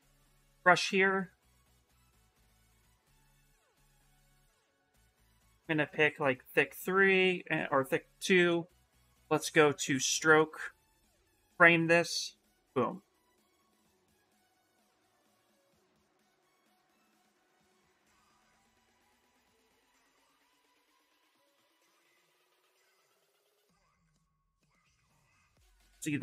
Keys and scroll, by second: 2.0 b, 13.6 s, 15.7 ctrl+z, 20.7 shift+f, 21.1 shift+f, 21.4 shift+f.